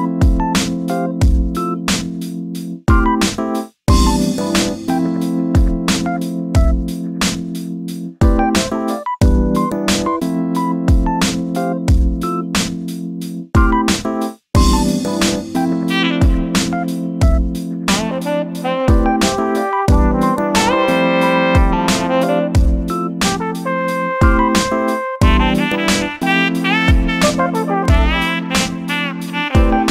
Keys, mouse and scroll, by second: 0.6 scroll down 3, 0.8 shift+middle click, 1.2 3, 1.7 click, 2.2 shift+click, 2.8 click, 3.1 shift+click, 3.6 shift+click, 4.2 click, 4.5 shift+click, 4.8 shift+click, 5.2 shift+click, 5.4 middle click, 5.7 scroll up 8, 5.9-7.1 middle drag, 7.1 shift+click, 7.2-7.7 scroll down 4, 7.7 shift+click, 8.0 shift+click, 8.2 shift+click, 8.5 shift+click, 8.7 shift+click, 9.4 ctrl+z, 9.6-10.1 ctrl+z, 10.3 ctrl+z, 10.4 ctrl+z, 10.6 ctrl+z, 10.8 ctrl+z, 11.2 ctrl+z, 11.4 ctrl+z, 11.6 ctrl+z, 11.8 ctrl+z, 12.1 ctrl+z, 12.3 ctrl+z, 12.6 ctrl+z, 13.2 ctrl+z, 13.5 ctrl+z, 13.8 ctrl+z, 14.0 ctrl+z, 14.3 ctrl+z, 14.7-16.0 ctrl+z, 16.9-18.7 shift+middle drag, 19.2-20.5 drag, 20.5 s, 22.6 s, 25.9 KP_7, 26.6 shift+middle click, 27.2 s.